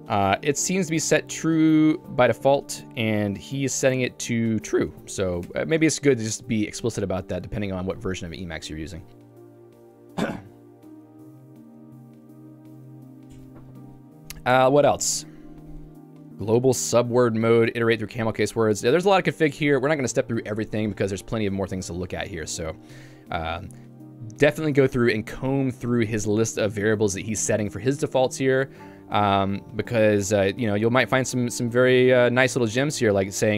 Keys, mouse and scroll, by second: 0.3 k, 0.9 j, 2.6 q, 3.9 j, 4.2 k, 5.0 shift+v, 5.5 Escape, 7.4 j, 23.2 k, 24.1 ctrl+u, 25.0 k, 25.9 j, 27.8 k.